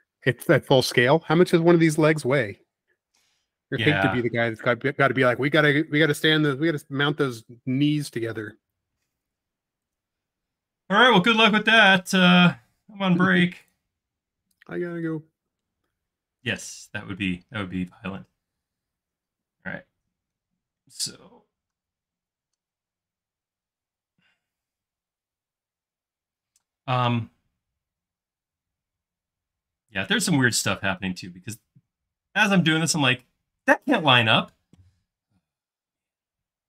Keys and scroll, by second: 3.4 l, 5.1 Up, 11.0 Up, 14.3 space.